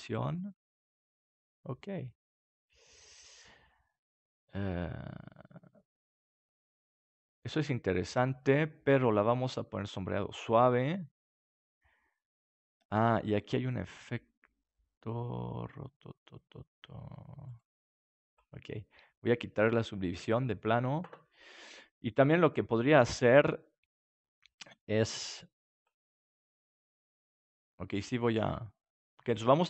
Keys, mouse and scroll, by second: 0.3 middle click, 1.1-2.3 middle drag, 10.1 click, 10.9-12.7 middle drag, 17.4-19.4 drag, 18.6-20.6 middle drag, 25.0-27.1 drag, 26.0-28.4 middle drag, 26.0-27.1 right drag, 29.3-29.6 drag.